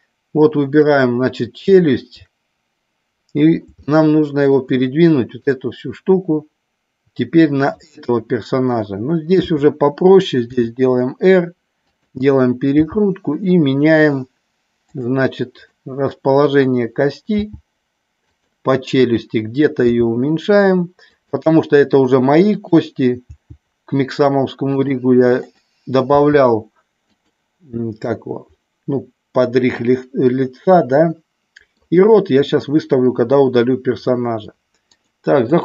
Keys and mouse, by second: 1.7 shift+click, 3.8 shift+middle click, 5.4-7.7 drag, 10.5 r, 11.9 click, 12.9 g, 15.0 click, 15.5 click, 17.3 g, 19.0 click, 19.8 g, 21.1 click, 23.2 g, 26.1 g, 27.1 click, 28.1-29.7 middle drag, 30.3-31.7 middle drag, 32.5 middle click, 34.9 click.